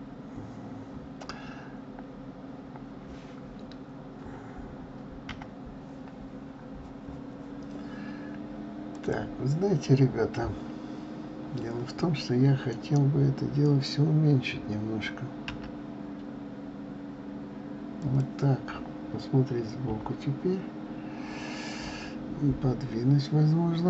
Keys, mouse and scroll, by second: 5.2 KP_7, 6.5-7.3 scroll down 12, 9.1 click, 15.8 s, 19.8 KP_0.